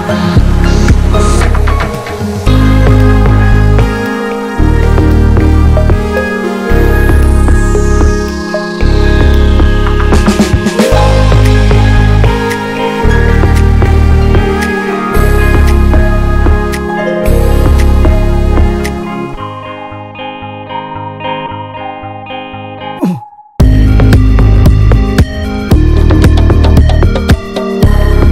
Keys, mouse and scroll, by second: 0.3 alt+middle click, 0.5 alt+middle click, 0.8-1.5 alt+scroll up 1, 1.8-11.6 shift+middle drag, 11.6 click, 12.0 scroll down 2, 12.4 middle click, 12.8 scroll down 1, 13.1-14.6 middle drag, 14.6 scroll down 1, 14.8-16.8 middle drag, 17.1-18.9 middle drag, 23.4 click, 24.1-25.4 middle drag, 26.4 ctrl+z, 27.7 click, 27.9-28.3 middle drag.